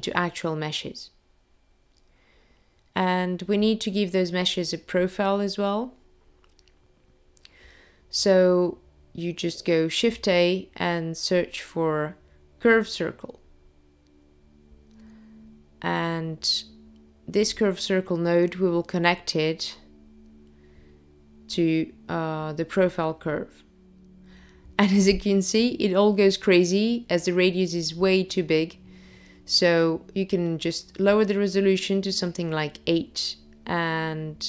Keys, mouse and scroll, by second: 0.1 click, 1.6 click, 7.8 click, 9.4 shift+a, 9.6 click, 18.0 click, 25.7 click, 31.0 click.